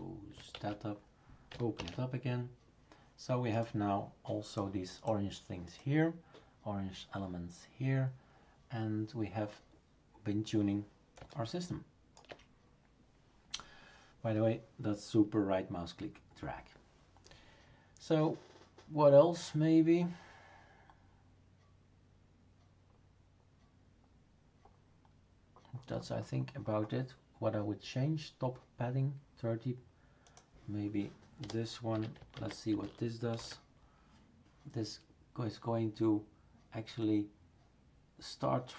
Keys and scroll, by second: 0.5 shift+super+q, 1.7 shift+super+Return, 31.4 BackSpace, 32.3 ctrl+s, 33.4 shift+super+r.